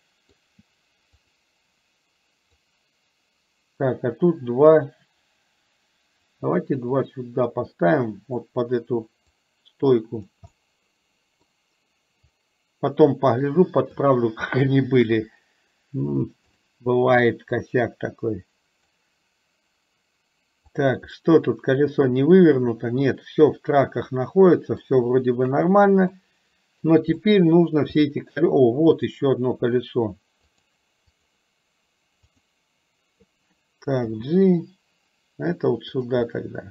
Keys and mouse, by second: 1.2 click, 2.7-6.4 drag, 7.0-8.5 drag, 9.5 click, 10.5-11.6 middle drag, 12.4-14.0 drag, 15.1 KP_3, 16.6 click, 17.7-19.1 drag, 20.7 click, 21.2-25.0 middle drag, 25.5 KP_1, 26.2-27.0 middle drag, 27.2-27.6 middle drag, 28.1 middle click, 29.0 click, 30.6-32.5 drag, 36.3 middle click.